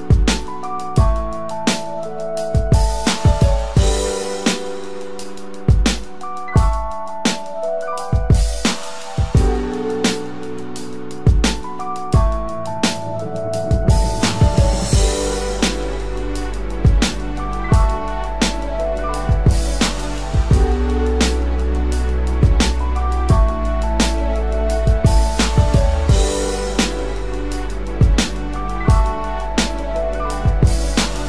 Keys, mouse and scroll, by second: 4.9 double click, 11.2 double click, 21.1-21.6 typing, 22.6 double click, 30.4 double click.